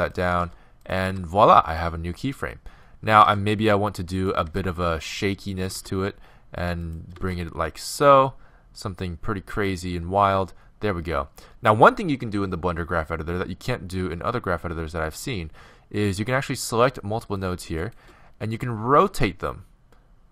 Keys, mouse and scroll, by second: 1.0 r, 1.0 g, 3.3 shift+d, 4.5 shift+d, 5.8 shift+d, 7.2 shift+d, 16.1-19.6 right drag, 19.0 r.